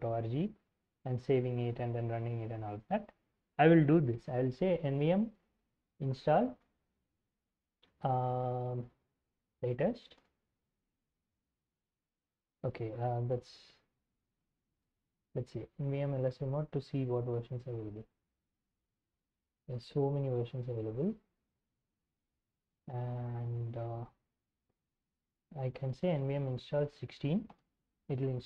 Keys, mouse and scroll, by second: 0.3-0.9 scroll down 2, 2.3 alt+Tab, 4.6-6.8 typing, 7.1 alt+Tab, 7.8 alt+Tab, 9.3-11.1 typing, 13.0-15.3 typing, 17.5-22.6 scroll up 2, 23.7-25.3 drag, 25.5-27.7 typing.